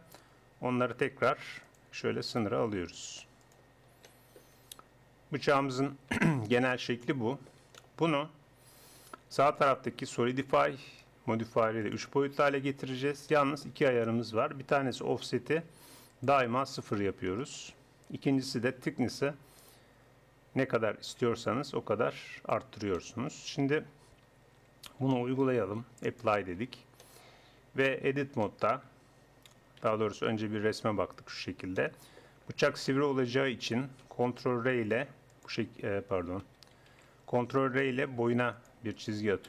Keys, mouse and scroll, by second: 2.3-4.1 drag, 2.5 g, 6.4 Tab, 9.9-11.2 drag, 11.5 middle click, 12.4-15.1 middle drag, 16.1-17.8 drag, 19.0-20.8 drag, 23.4 Tab, 24.7 Tab, 26.0-28.4 drag, 26.6 Tab, 29.8 KP_1, 34.6 ctrl+r, 37.0 ctrl+z, 38.1 ctrl+r, 39.3 Escape.